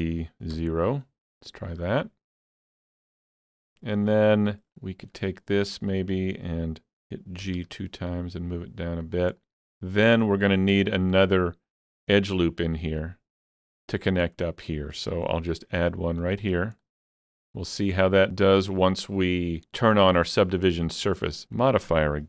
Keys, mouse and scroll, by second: 0.5 0, 2.0-2.4 scroll down 2, 2.4-5.1 middle drag, 4.7 alt+click, 5.1-9.1 alt+middle drag, 7.4 g, 7.6 g, 9.1 click, 9.4-16.2 middle drag, 10.7 click, 15.5 ctrl+r, 16.2 click, 16.4 double click, 16.8-20.2 middle drag, 20.2-21.3 middle drag, 20.2 double click, 21.1 scroll up 2.